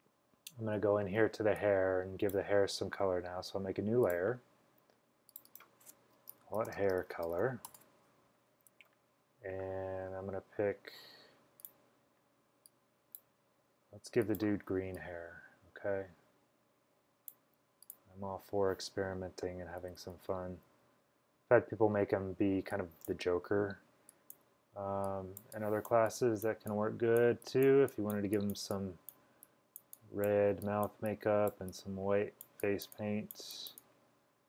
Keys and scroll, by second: 1.4 space, 1.9-2.3 space, 6.2-8.0 typing, 19.7-21.2 typing, 24.2-24.9 typing.